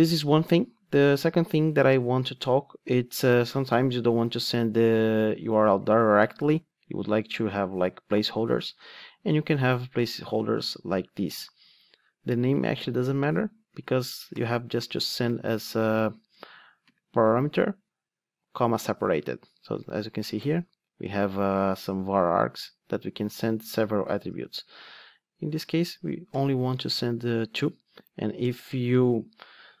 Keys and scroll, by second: 20.3 super+p.